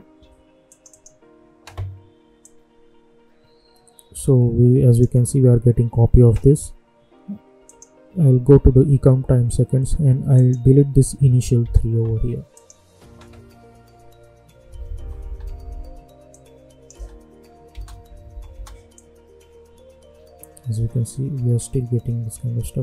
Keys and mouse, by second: 0.6-7.6 drag, 10.3 click, 12.5 click, 14.9 space, 16.3 click, 16.9 space, 18.9-22.8 drag.